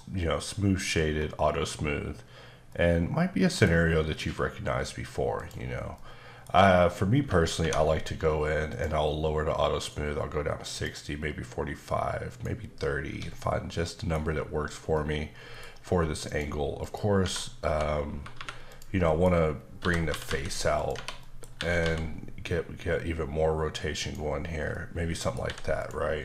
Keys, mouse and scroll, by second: 1.1-2.7 scroll up 1, 2.7 middle click, 5.3 click, 5.9 middle click, 8.7 click, 10.7 click, 12.2 click, 13.1 Escape, 13.3 middle click, 14.9 middle click, 16.2 click, 16.8 click, 17.2 Tab, 17.6-18.3 typing, 18.7 click, 19.1 middle click, 19.3-19.7 scroll down 2, 19.7-20.3 typing, 20.7 click, 20.9 Tab, 21.2 middle click, 21.5 typing, 23.9 click, 24.7 middle click, 25.4 h, 25.8 click.